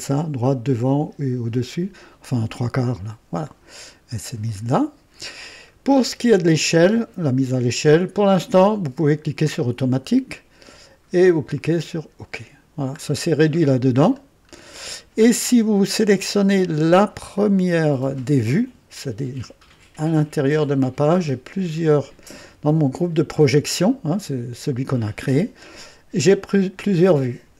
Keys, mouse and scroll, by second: 2.3 click, 3.5-3.9 scroll down 2, 4.4-5.2 right drag, 7.8 click, 9.5 click, 11.6 click, 12.9-13.2 scroll up 2, 13.5-14.7 scroll up 5, 15.2 scroll up 2, 16.5 right click, 17.3 click, 20.5 click, 21.9 click.